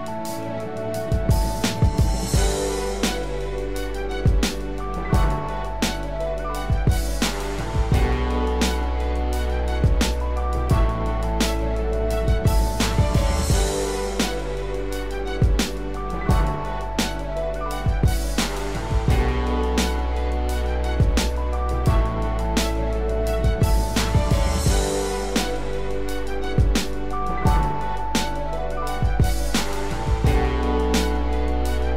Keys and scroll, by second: 27.5 ctrl+=.